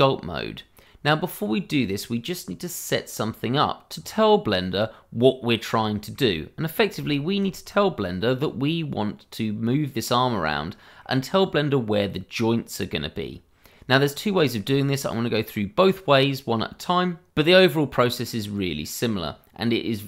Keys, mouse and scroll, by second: 2.0 middle click, 5.8 shift+middle click, 6.3-6.6 scroll up 1, 6.6 middle click, 7.1 shift+middle click, 7.6-8.0 scroll up 1, 8.0 middle click, 10.6 middle click, 11.5-13.5 scroll down 1, 15.5-17.3 scroll down 1.